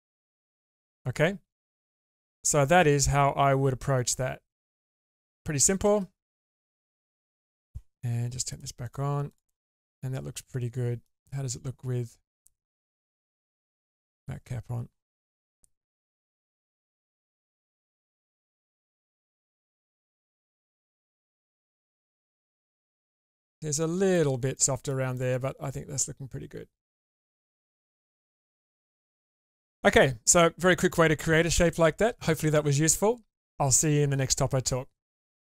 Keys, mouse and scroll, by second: 0.2 Tab, 0.9-5.3 middle drag, 5.8 shift+space, 7.0-7.6 middle drag, 8.5 click, 8.8 click, 9.3 click, 9.8-11.0 middle drag, 13.0-14.9 drag, 17.2-21.6 drag, 21.8-24.1 middle drag, 24.6 middle click, 25.2-30.0 middle drag.